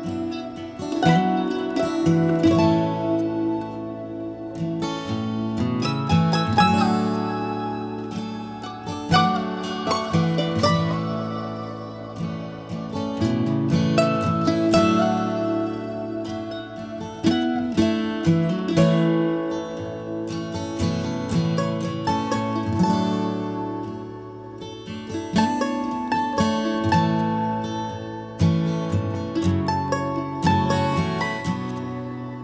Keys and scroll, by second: 4.4-5.3 typing, 13.4-14.3 typing, 30.9 Escape.